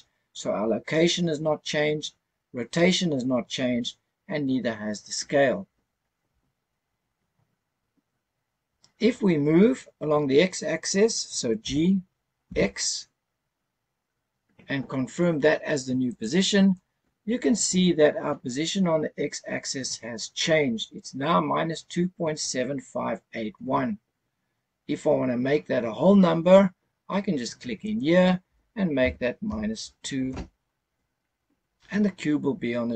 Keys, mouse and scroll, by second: 11.6 g, 12.4 x, 16.1 click, 27.8-30.3 drag.